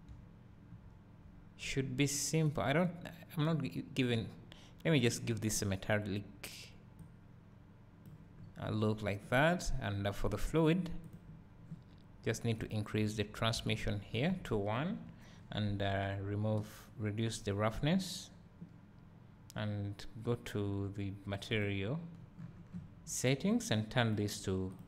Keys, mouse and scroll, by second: 2.9 click, 5.1-9.6 drag, 8.8-9.6 scroll up 2, 11.2 drag, 13.9-22.3 drag, 22.4 scroll down 1.